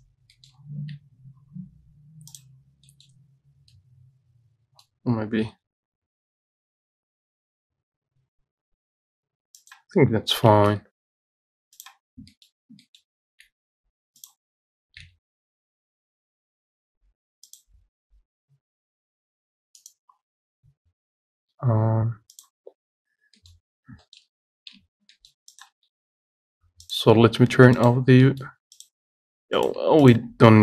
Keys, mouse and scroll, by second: 0.6 shift+middle click, 1.2 g, 2.8 scroll down 1, 3.1 middle click, 3.4 scroll up 2, 4.0-5.7 middle drag, 5.7 g, 10.7 shift+d, 12.3-12.9 scroll up 4, 12.5 shift+middle click, 13.1 shift+middle click, 13.7 g, 15.2 g, 20.9 g, 22.9-23.4 scroll down 5, 23.4 scroll up 1, 23.6 middle click, 24.2 shift+middle click, 24.5-25.0 scroll up 2, 25.0 Tab, 25.4 middle click, 25.8 click, 25.9 Tab, 28.0 click, 28.5 middle click, 29.1 click, 29.9 click, 30.4 shift+click.